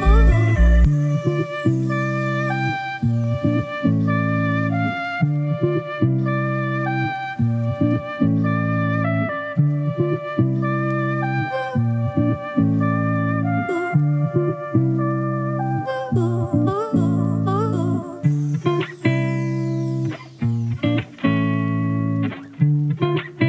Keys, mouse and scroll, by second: 1.8 click, 4.1-5.4 drag, 9.1 click, 9.9 click, 10.5 Delete, 11.1 click, 11.1-12.2 typing, 11.8-13.1 drag, 18.0-20.3 drag, 20.7-21.7 drag.